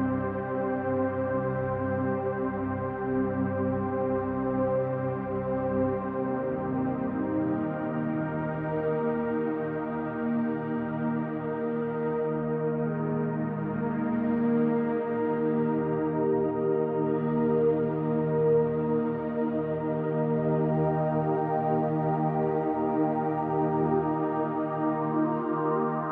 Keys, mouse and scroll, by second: 0.9 click, 1.3 scroll down 2, 1.4 shift+middle click, 1.8-2.4 scroll up 2, 2.4-3.4 drag, 3.4 e, 4.7 click, 5.7-6.8 middle drag, 6.8 click, 7.4-8.8 middle drag, 8.8-10.2 drag, 10.2-15.2 middle drag, 10.8 KP_1, 12.1 shift+d, 15.2 click, 15.5-17.9 middle drag, 17.9-20.4 drag, 20.4 KP_1, 21.1 g, 23.2 click, 25.4 alt+a.